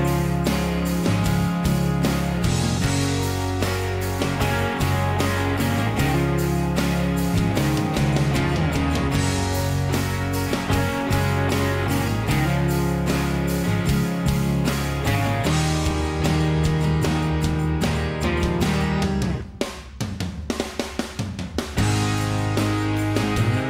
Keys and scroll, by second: 18.1 BackSpace, 18.2 Return, 18.2 5.